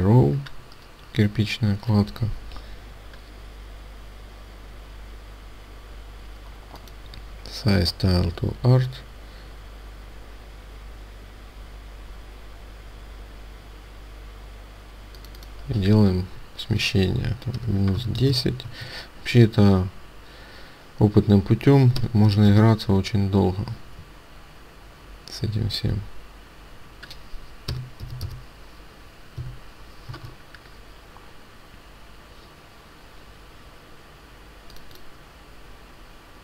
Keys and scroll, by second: 18.6 Tab, 29.3 Delete, 30.0 Tab, 33.6 Tab.